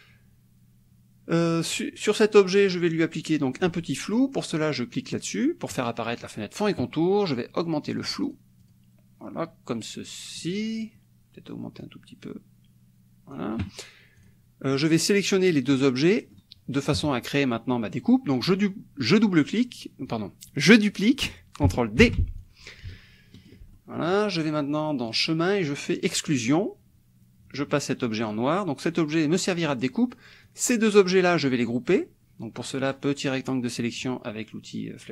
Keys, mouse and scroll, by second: 2.7-3.8 drag, 8.0 click, 11.8-13.5 drag, 14.3 click, 14.7-16.0 drag, 16.0-17.1 middle drag, 17.0 KP_Subtract, 17.7 middle click, 17.9 click, 22.0 ctrl+d, 22.4-23.7 ctrl+drag, 23.7 ctrl+middle click, 25.0 click, 26.0 click, 28.3 click, 29.3 click, 30.0-31.7 drag, 32.9-34.2 drag.